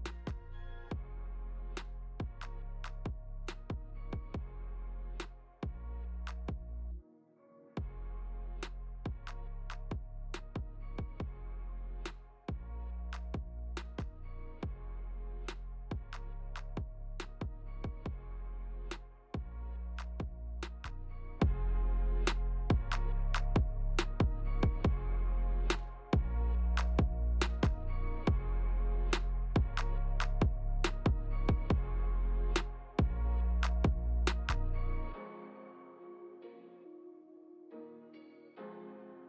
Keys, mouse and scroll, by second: 1.1 click, 1.7 middle click, 3.1 scroll down 2, 3.9 click, 6.9 click, 9.5 shift+click, 11.0 click, 11.8 click, 12.7 Tab, 13.7 a, 14.9 click, 15.4 click, 15.7 click, 15.9 click, 16.5 Tab, 17.4 click, 21.1 click, 21.7 Tab, 22.4 Tab, 22.9 click, 23.3 Tab, 25.9 Tab, 27.3 shift+click, 28.8 ctrl+j, 30.2 click, 32.5 click, 37.6 middle click.